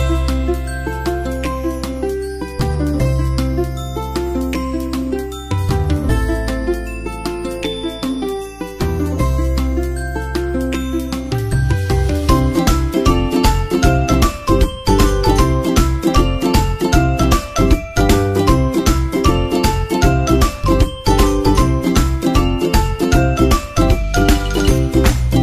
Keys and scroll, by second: 8.9 super+s, 10.3 super+Tab, 11.2 super+Tab, 15.2 super+Tab, 15.5 super+Tab, 22.6 super+v, 23.6 super+v, 24.4 super+v, 24.9 super+s, 25.1 super+Tab.